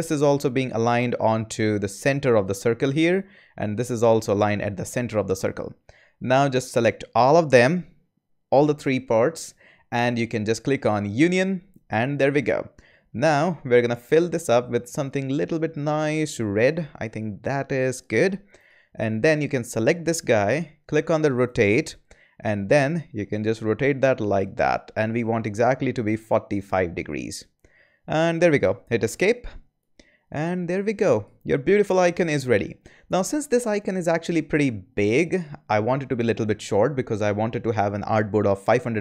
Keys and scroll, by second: 29.0 Escape.